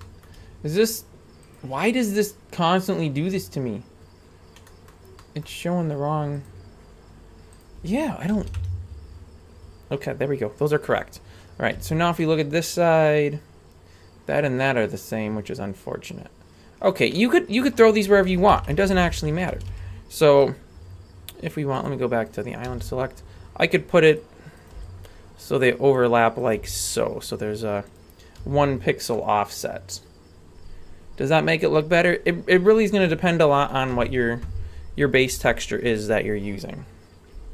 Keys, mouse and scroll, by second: 0.0 shift+middle click, 1.5-4.6 drag, 5.1 middle click, 6.4-10.0 drag, 11.8 a, 12.2-17.2 middle drag, 17.9 right click, 18.5 ctrl+KP_Add, 18.7 ctrl+KP_Add, 18.8 ctrl+KP_Add, 19.0 ctrl+KP_Add, 19.1 ctrl+KP_Add, 19.3 ctrl+KP_Add, 19.5 a, 19.7 a, 20.3-21.8 right drag, 21.8 click, 22.3 right click, 22.7 g, 24.6 right click, 24.7 g, 26.4 right click, 26.6 g, 28.4 a, 28.7-29.3 scroll down 2, 29.1-32.7 middle drag, 33.4 middle click, 33.9 a, 35.3 g.